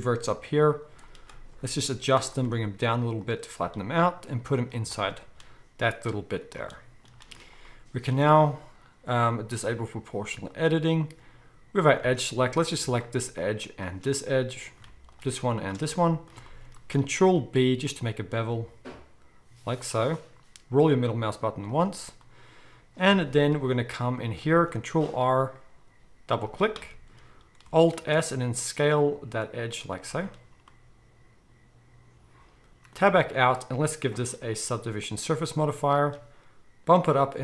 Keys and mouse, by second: 0.3 g, 2.2-5.3 middle drag, 2.4 r, 3.6 g, 4.7 z, 9.1-10.6 drag, 12.0 alt+a, 12.8 alt+shift+click, 13.6 alt+shift+click, 13.7-15.1 alt+shift+middle drag, 15.1 alt+shift+click, 15.8-16.9 middle drag, 17.2 ctrl+b, 21.8-23.1 middle drag, 23.3-24.5 middle drag, 24.8 ctrl+r, 27.8 alt+middle click, 27.9 alt+s, 30.1-34.1 middle drag, 33.0 Tab, 34.1-37.4 drag.